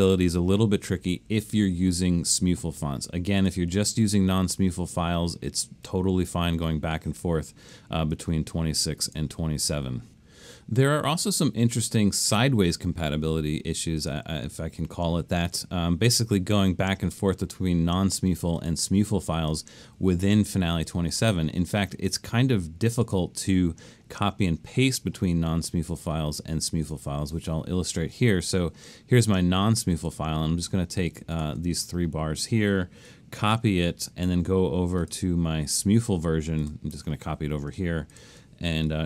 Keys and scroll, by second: 33.4 super+c.